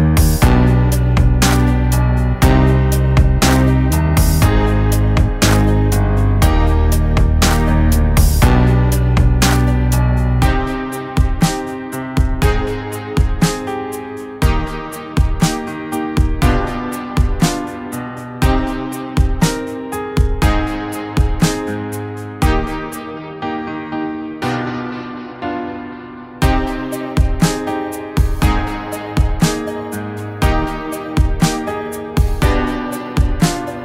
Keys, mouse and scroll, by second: 1.7-8.4 drag, 12.0 Right, 13.1 click, 17.2 click, 20.3 click, 22.6 click, 25.7 click, 25.7 click, 30.5 click, 33.1 click.